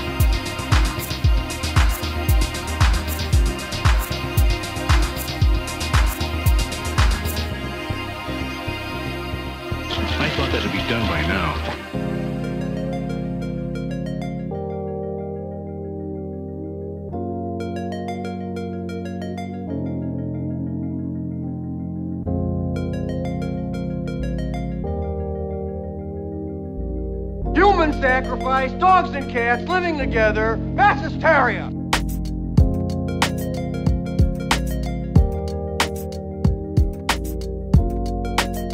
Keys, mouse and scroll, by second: 1.9 click, 4.8 click, 7.4 click, 9.2 Delete, 21.8-30.4 ctrl+drag.